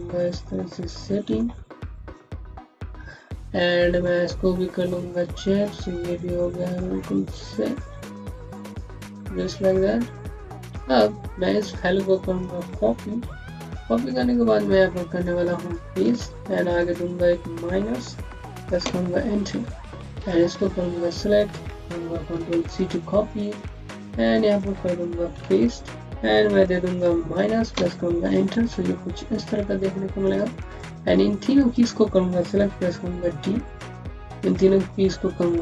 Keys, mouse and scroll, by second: 3.1 scroll down 1, 3.9 click, 4.8 alt+middle click, 5.3 click, 5.8 middle click, 8.5 click, 9.3 alt+middle click, 9.7 scroll down 1, 10.1 alt+middle click, 10.3 scroll down 1, 10.5-11.1 scroll up 2, 11.1 click, 12.9 ctrl+c, 13.1 typing, 13.9 click, 15.9 ctrl+v, 16.6 click, 18.2 KP_Subtract, 18.6 KP_Enter, 19.8 click, 22.0 ctrl+c, 23.1 click, 25.2 v, 26.0 click, 26.8 KP_Subtract, 27.5 KP_Enter, 28.5-29.1 scroll up 1, 29.1-29.9 scroll down 1, 30.1 click, 30.6-31.4 typing, 32.6-34.3 typing, 33.6 click, 34.8-35.3 scroll up 1.